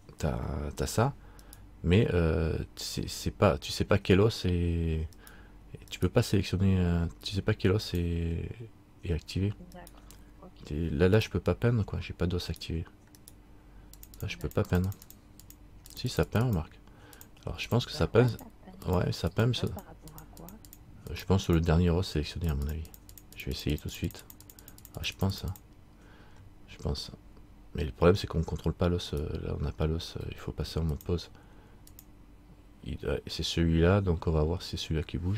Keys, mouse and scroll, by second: 1.6 right click, 5.3 right click, 8.0 right click, 8.0 click, 9.9 right click, 11.3 click, 12.7 right click, 13.4 right click, 14.2 click, 14.7 click, 29.3 right click, 31.1 click, 34.6-35.3 scroll down 1.